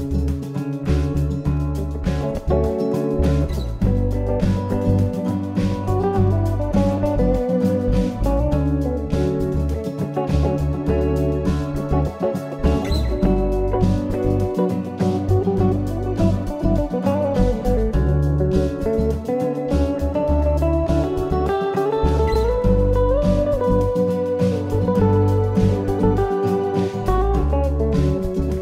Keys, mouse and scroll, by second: 0.1 middle click, 4.8 click, 11.2 click, 16.2 ctrl+r, 23.9 ctrl+r.